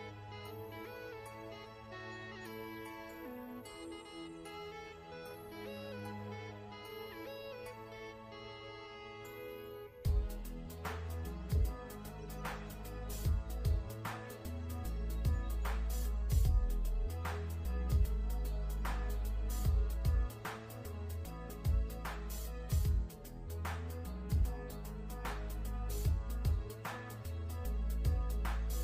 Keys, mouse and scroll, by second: 1.0 i, 1.1 click, 1.4 scroll up 1, 1.6 ctrl+scroll down 2, 1.8 v, 2.2 click, 9.8 click, 16.4-16.8 scroll up 2, 16.9 ctrl+scroll down 1, 17.4 click, 18.0 g, 18.8 click, 19.5 v, 19.7 click, 20.8 g, 21.9 click, 22.6 v, 22.9 click, 23.3 scroll up 1, 23.5-24.1 ctrl+scroll down 2, 24.1 click, 24.9 g, 25.8 click.